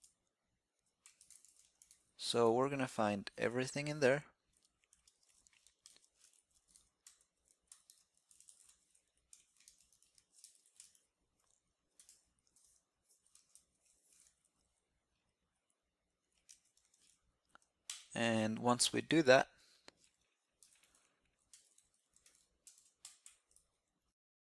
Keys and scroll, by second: 1.7 alt+c, 1.7 alt+c, 15.3 alt+c, 16.7 alt+c.